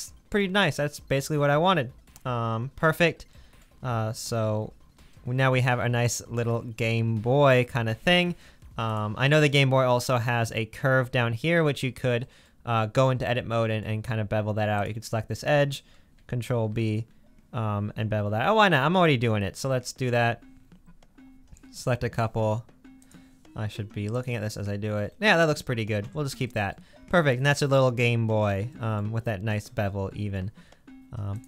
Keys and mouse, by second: 9.0-13.9 middle drag, 13.9 Tab, 16.6 ctrl+b, 17.9 click, 18.5 middle click, 21.6-24.1 middle drag, 24.3-26.5 middle drag, 26.0 Tab, 27.9-31.4 middle drag.